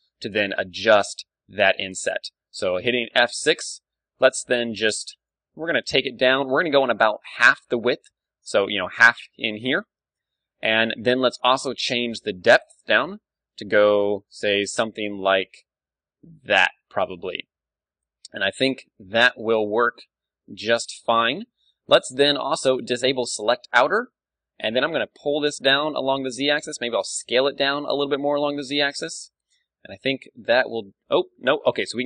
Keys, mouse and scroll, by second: 1.5 t, 3.2 F6, 10.2 F6, 24.6 g, 26.2-27.8 drag, 26.5 s, 27.9-29.3 drag, 28.7 g, 29.3 middle click, 30.7-32.0 middle drag.